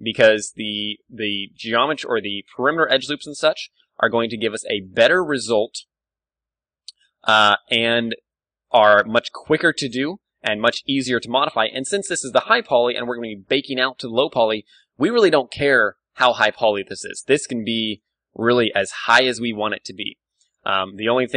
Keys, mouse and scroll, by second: 1.0-2.8 drag, 1.4 ctrl+r, 3.5-5.4 drag, 4.3 g, 5.0 a, 5.4 middle click, 6.3 s, 7.4-10.5 drag, 7.5 g, 8.8 z, 9.4 a, 9.5-11.0 middle drag, 9.7 ctrl+r, 11.5-13.3 drag, 11.5 z, 11.7 Tab, 13.8 KP_1, 16.4 Tab, 17.4 ctrl+r, 18.0-19.5 drag, 18.2 s, 19.5 right click, 19.6-21.3 drag, 19.8 Tab, 20.2 ctrl+w.